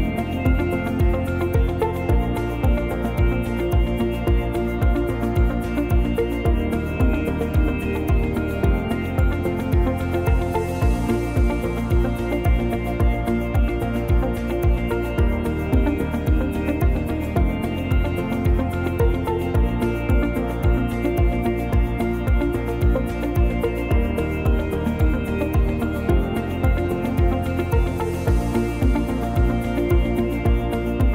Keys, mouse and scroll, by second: 2.5 f, 3.1 click, 3.9 click, 5.9 click, 7.2 f, 7.5 click, 7.9 click, 11.0 click, 11.2 click, 11.5 click, 12.1 click, 12.9 click, 14.9 p, 15.8 middle click, 16.3 Tab, 16.5 click, 16.9 click, 17.5 right click, 19.8 click, 19.8 right click, 21.4 click, 22.1 right click, 23.9 click, 24.6 middle click, 25.0 scroll down 1, 25.1 r, 25.9 click, 26.5 middle click, 26.9 click, 28.5 click, 29.0-29.7 scroll up 2, 29.7 click.